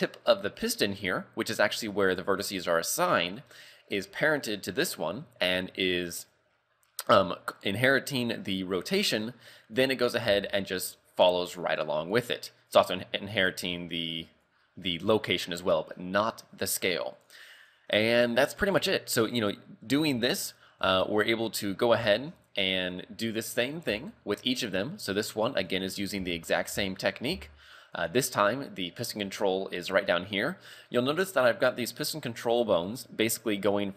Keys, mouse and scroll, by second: 0.6 right click, 6.2 click, 6.9-7.8 scroll down 4, 9.7 right click, 10.3 r, 14.3 right click, 17.2 right click, 17.6 right click, 18.7 click, 19.8-20.2 scroll down 3, 20.3 shift+middle click, 21.0 shift+middle click, 21.6 scroll down 2, 22.1 shift+middle click, 22.8 scroll up 2, 24.0 shift+middle click, 24.6 scroll up 3, 25.7 right click, 26.0 scroll down 3, 26.3 shift+middle click, 26.8 z, 27.1 scroll up 2, 27.3 z, 28.0 right click, 28.4 scroll down 1, 30.4 scroll down 4, 31.3 scroll up 2.